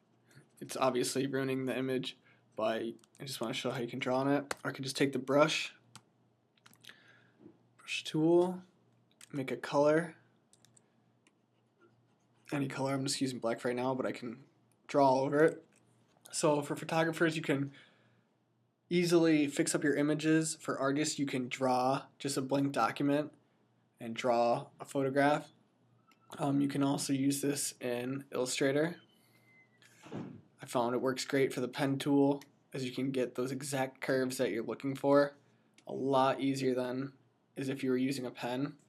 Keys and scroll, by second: 3.4-4.4 typing, 5.8-9.1 typing, 10.5 typing.